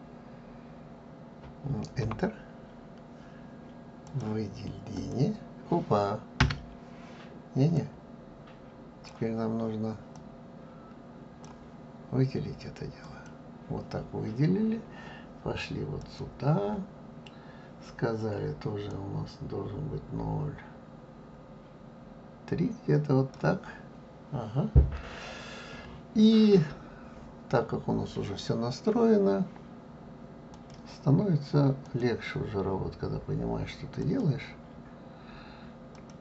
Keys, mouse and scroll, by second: 4.0-7.1 drag, 7.7-13.1 drag, 16.0 click, 18.9-21.9 drag, 30.4 click, 31.8-34.8 drag, 35.9-36.2 drag.